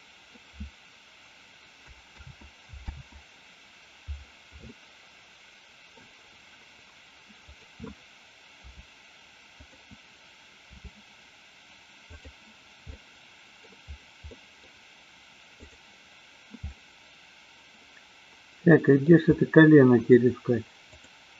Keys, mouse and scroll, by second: 2.2 ctrl+z, 4.7-5.9 middle drag, 7.6 click, 8.6 g, 9.7 click, 10.7 r, 12.9-13.6 middle drag, 14.3 middle click, 15.6-16.1 drag, 16.7-19.2 middle drag, 20.8 click.